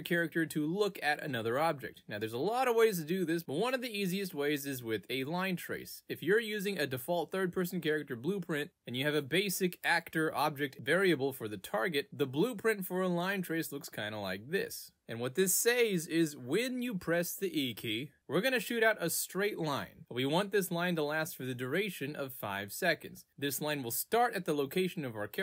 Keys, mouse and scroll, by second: 0.8 w, 3.9 click, 4.5 click, 5.0-6.2 typing, 10.0 click, 10.0 r, 12.0 right click, 16.1 click, 18.8 click, 23.2 click.